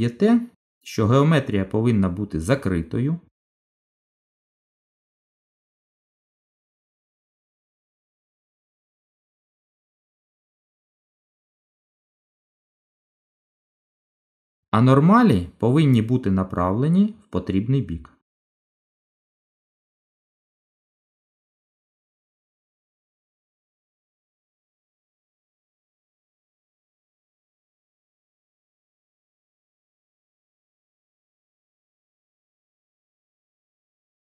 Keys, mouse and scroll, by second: 1.1 f, 1.5-1.9 scroll down 2, 1.9 middle click, 3.3-3.8 scroll up 2, 3.8 middle click, 7.7 a, 9.8 click, 16.1 middle click, 20.5 middle click, 26.3 click, 30.5 middle click, 32.3 Tab, 32.9 right click.